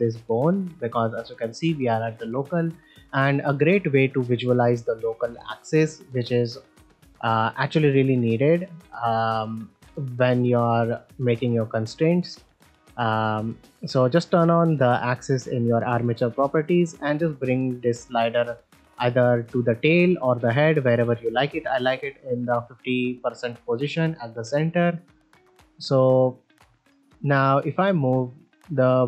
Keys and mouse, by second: 1.0-2.3 drag, 3.6 shift+middle drag, 4.1 ctrl+middle click, 6.6 click, 9.9 middle click, 11.5 shift+middle drag, 11.9 ctrl+middle click, 13.3 click, 16.8-21.8 drag, 23.4-23.8 middle drag, 24.2 shift+middle drag, 24.6 ctrl+middle drag, 25.3 middle click, 26.5 shift+middle click, 26.7 ctrl+middle drag, 27.0 middle drag, 27.8-28.9 drag.